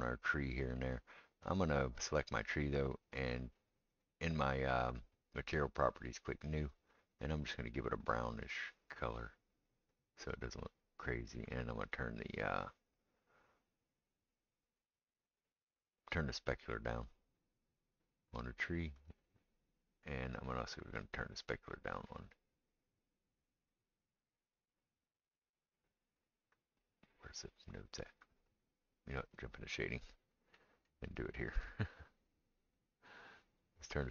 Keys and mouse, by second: 0.2-13.2 middle drag, 1.5 click, 4.0 click, 6.2-7.5 drag, 13.2-31.9 right drag, 14.9-19.1 drag, 14.9-19.1 middle drag, 23.7 click, 23.7 middle click, 26.1-29.3 drag, 26.1-29.3 middle drag, 31.6-34.1 drag, 31.6 middle click.